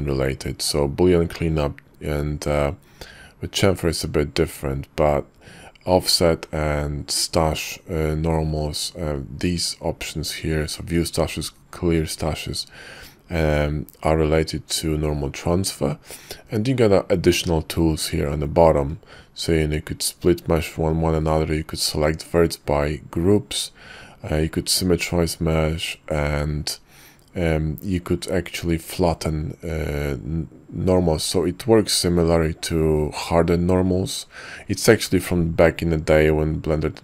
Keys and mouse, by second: 17.9 y.